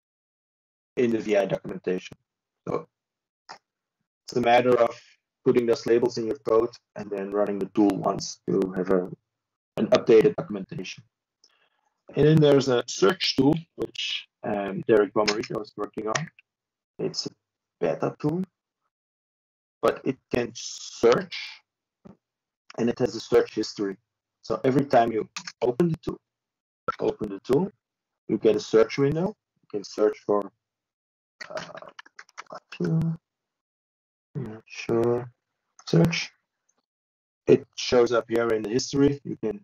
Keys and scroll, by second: 10.7 ctrl+space, 12.2 ctrl+y.